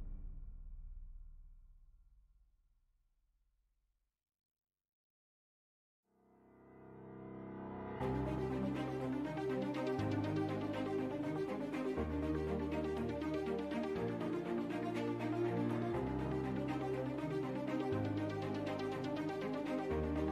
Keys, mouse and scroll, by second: 0.0-5.4 typing, 1.1-1.6 drag, 6.5 middle click, 6.9 shift+z, 8.0 shift+z, 8.6 x, 8.8 shift+a, 9.8 g, 12.7 s, 13.8 ., 14.0 r, 15.3 ctrl+z, 15.6 g, 16.1 r, 17.3 shift+d, 17.5 r, 18.7-20.3 middle drag.